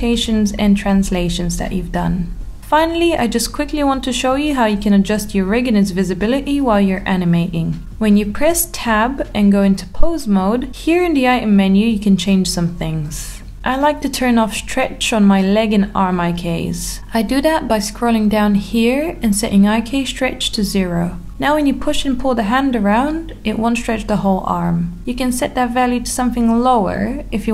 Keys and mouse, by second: 2.8 middle click, 5.1 click, 6.4 middle click, 7.3 g, 9.6 click, 10.9 ctrl+z, 16.6-18.5 drag, 19.3 g, 24.9 Escape, 25.8 click, 26.4 middle click, 26.8 g.